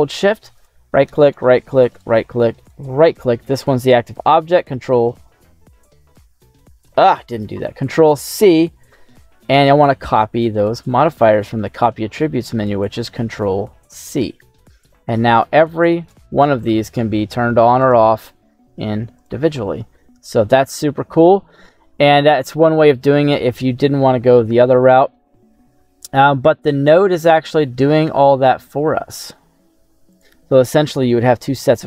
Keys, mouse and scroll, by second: 0.5 shift+right click, 1.2 shift+right click, 1.9 shift+right click, 2.6 shift+right click, 4.9 ctrl+v, 6.9 ctrl+z, 8.2 ctrl+c, 16.0 right click, 17.7 click, 19.1 click, 19.9 middle click, 21.7-23.4 middle drag, 21.7 scroll down 1, 23.7-24.6 scroll up 1, 31.0 middle click.